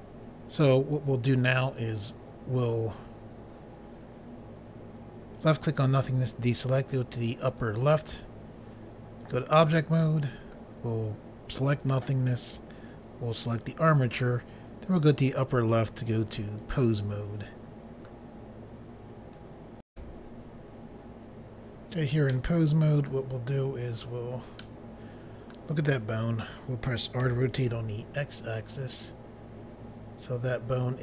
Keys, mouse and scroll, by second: 5.4 click, 7.5 click, 9.3 click, 11.7 click, 13.4 click, 15.4 click, 16.6 click, 19.9 Insert, 21.1 Pause, 22.3 middle click, 23.4 scroll up 1, 24.6 middle click, 24.6 scroll up 1, 26.0 scroll down 1, 27.2-27.6 typing.